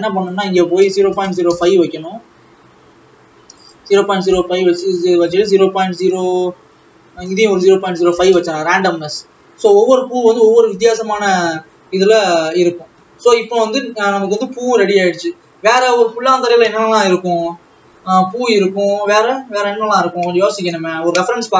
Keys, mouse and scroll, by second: 2.0 KP_0, 4.7-12.0 drag, 12.0 ctrl+s, 15.5-17.9 drag, 17.9-19.8 scroll up 1, 19.8-21.0 scroll up 1.